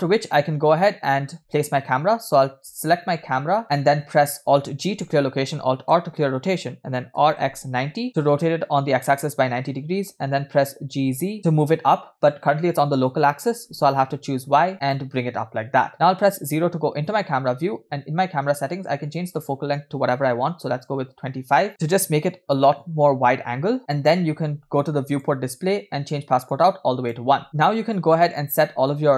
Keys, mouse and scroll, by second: 1.3 scroll down 1, 3.4-3.7 scroll up 4, 3.7 click, 5.1 alt+g, 9.8 scroll down 1, 10.7 g, 16.1 KP_0, 19.0-21.0 drag, 25.1 click, 25.7 scroll down 1, 26.5 click.